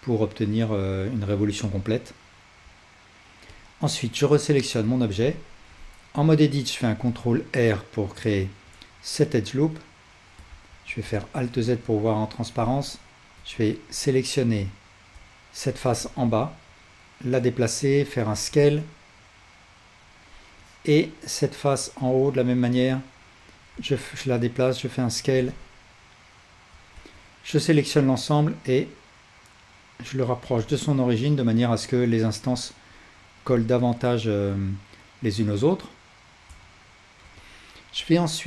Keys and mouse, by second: 4.8 Tab, 5.3-8.8 alt+drag, 6.9 ctrl+r, 10.5 alt+z, 11.3-20.1 ctrl+alt+shift+drag, 13.4 1, 18.3 s, 20.7-25.3 drag, 23.8 s, 25.6-38.4 drag, 27.0 a.